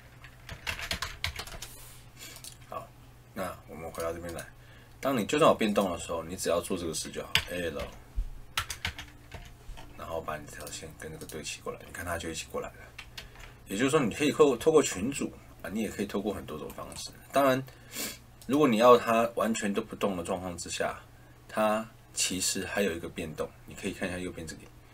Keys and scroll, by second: 0.2-1.7 typing, 7.3 a, 7.7 l, 13.1 ctrl+z, 14.5 Escape.